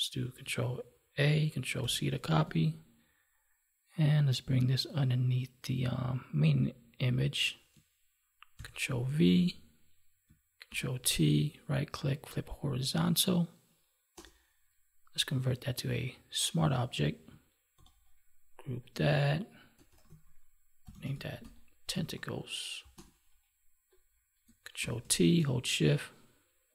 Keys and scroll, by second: 1.1 ctrl+a, 2.3 ctrl+Tab, 8.5 ctrl+v, 10.6 ctrl+t, 17.6 ctrl+g, 24.7 ctrl+t.